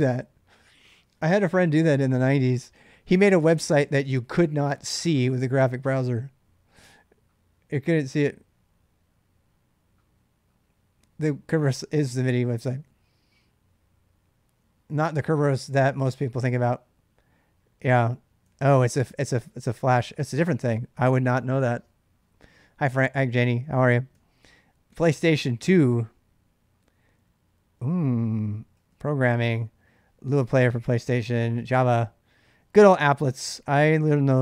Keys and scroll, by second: 18.2 j, 19.2 k, 24.0 j, 24.1 j, 28.3-34.4 typing.